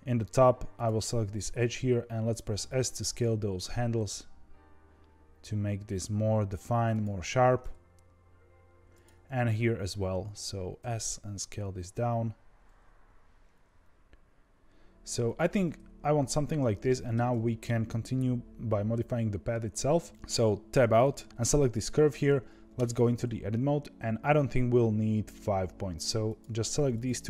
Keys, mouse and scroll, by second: 0.7 click, 2.5 s, 8.9 click, 10.7 s, 16.2-16.6 scroll down 1, 16.6-17.9 middle drag, 17.9-20.1 scroll up 2, 20.6 Tab, 21.6 click, 22.7 Tab, 26.2 click, 26.8 shift+click.